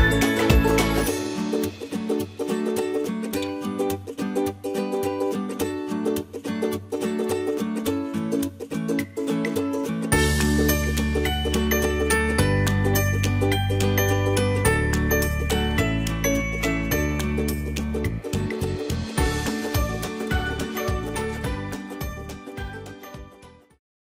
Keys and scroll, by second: 8.9 ctrl+z, 12.9 ctrl+c, 14.0 ctrl+shift+v, 20.1 F9.